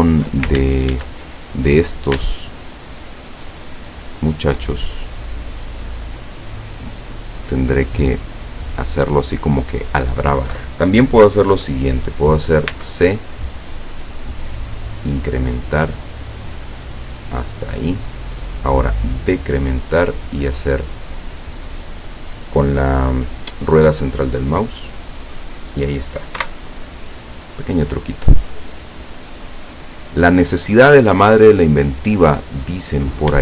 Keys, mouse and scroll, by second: 0.0 alt+shift+right click, 0.7 ctrl+alt+shift+z, 2.5 alt+shift+right click, 3.7 alt+shift+right click, 4.3 alt+shift+right click, 5.1 alt+shift+right click, 6.0 alt+shift+right click, 6.4 alt+shift+right click, 7.2 alt+shift+right click, 8.3 alt+shift+right click, 12.8 c, 13.8-14.2 scroll up 2, 14.2 scroll down 2, 16.4 scroll down 2, 17.7 click, 19.0-19.4 scroll up 2, 24.2 middle click, 26.4 Escape, 28.0-29.2 middle drag, 29.2-29.6 scroll down 1, 29.7-32.1 middle drag, 32.7 scroll up 1.